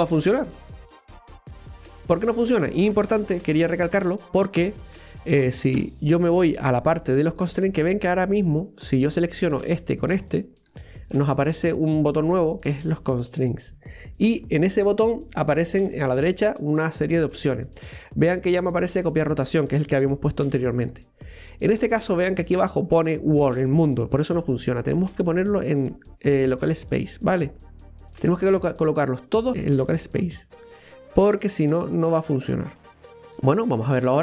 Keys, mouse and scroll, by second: 0.8 r, 4.3 ctrl+z, 4.4 click, 5.8 KP_1, 9.6 right click, 10.3 shift+right click, 12.8 click, 24.4-29.3 drag, 29.3 right click, 29.5 shift+right click, 30.6-33.1 drag, 33.1-34.2 middle drag.